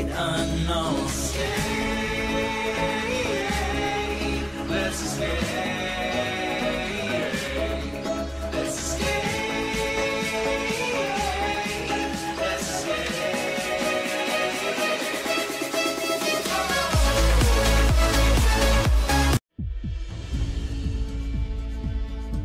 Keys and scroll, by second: 3.5 j, 9.8 h, 10.7 F5, 11.9 l, 15.1 Return, 15.5 [.